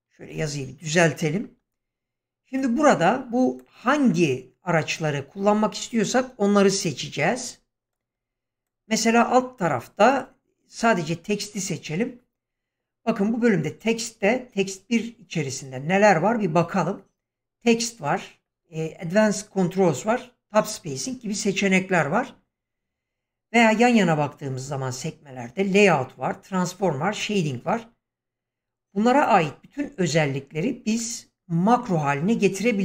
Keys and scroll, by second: 0.3 a.